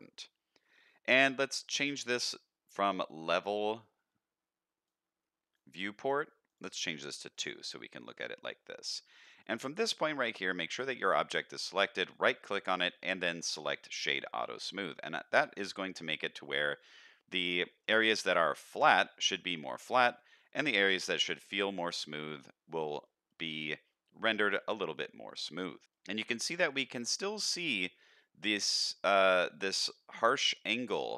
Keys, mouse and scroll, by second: 4.8 click, 6.4 click, 7.3 middle drag, 7.7-8.1 scroll up 1, 8.1 middle click, 9.2 middle click, 9.7 click, 10.0 middle click, 10.9 shift+middle click, 11.3 middle click, 12.1-14.0 right drag, 14.6-14.9 middle drag, 15.1-15.6 middle drag, 15.8 middle click, 17.6 middle click, 19.1 middle click, 20.4 middle click, 21.2 middle click, 22.1 middle drag, 23.0-23.4 middle drag, 24.6-25.7 middle drag, 25.8 middle click, 26.1 scroll up 1, 26.5 middle click.